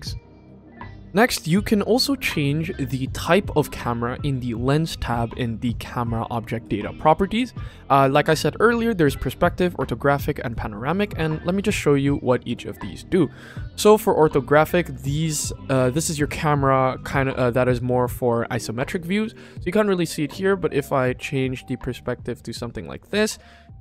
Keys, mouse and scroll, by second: 0.1 click, 7.6-10.1 drag, 10.3-11.0 drag, 13.0-13.6 drag, 18.8 q, 19.7-20.8 middle drag, 21.2-22.4 shift+middle drag.